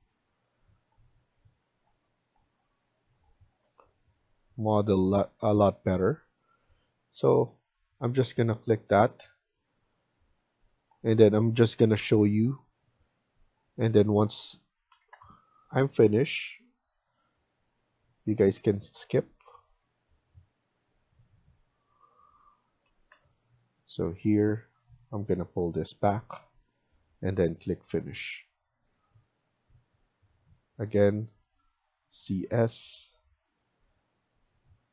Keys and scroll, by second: 3.5 F1, 14.8-15.1 typing, 19.6 Escape, 21.0 Escape, 21.2 Escape, 23.1 Delete, 31.9-32.7 typing.